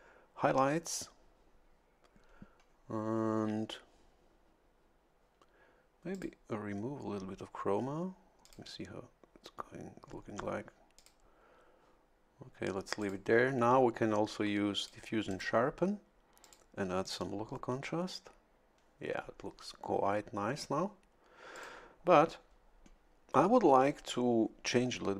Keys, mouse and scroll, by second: 6.1 click, 8.4 click, 11.0 click, 13.0 click, 14.8 click, 15.3 click, 16.4 click, 17.0 click, 21.5 click.